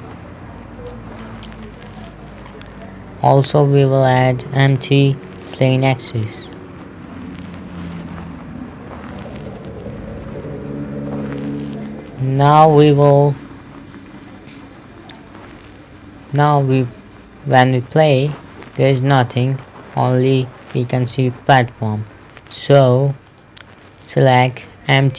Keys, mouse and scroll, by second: 1.8 middle click, 2.9 scroll up 1, 3.7 shift+a, 5.9 click, 9.1 KP_3, 10.5 click, 12.5 middle click, 18.2 p, 21.6 Escape, 23.8 right click.